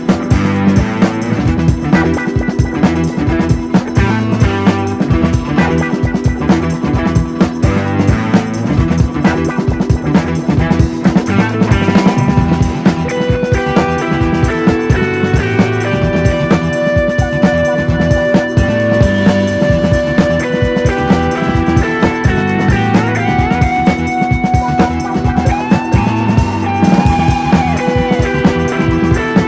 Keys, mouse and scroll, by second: 0.1 shift+middle click, 0.8 click, 1.5 l, 1.9 shift+d, 3.1 g, 4.3 KP_1, 4.6 KP_9, 5.0 scroll down 2, 5.2 shift+middle click, 5.6 KP_1, 6.1 KP_3, 6.9-7.9 scroll up 1, 8.1 /, 8.3-8.7 scroll up 1, 8.7 shift+middle click, 9.1 click, 11.0 middle click, 11.5 click, 12.1 middle click, 12.5 click, 13.2 middle click, 13.7 click, 14.4-15.0 scroll down 3, 14.5 middle click, 14.7 click, 15.0 middle click, 15.3 Tab, 15.4 drag, 15.6-15.9 scroll up 1, 15.9 /, 16.1 scroll down 1, 16.4-16.7 middle drag, 16.7 scroll down 1, 16.8 shift+middle click, 17.3 click, 17.8 /, 18.1 KP_1, 18.8 Tab, 19.0 click, 19.4 l, 20.0 shift+d, 22.3 click, 22.9 l, 23.7 shift+d, 25.7 KP_1, 25.9 KP_3, 26.2 scroll up 1, 26.4 click, 27.3 click, 27.7 l, 27.9 click, 28.9 click, 29.0 scroll down 2, 29.2 middle click.